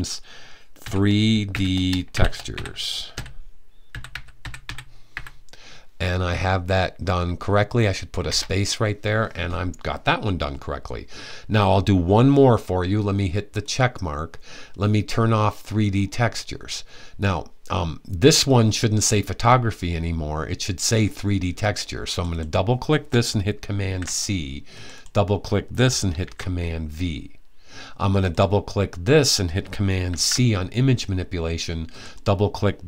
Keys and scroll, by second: 0.4-4.8 typing, 23.4 super+c, 25.9 super+v, 29.7 super+c, 32.7 super+c.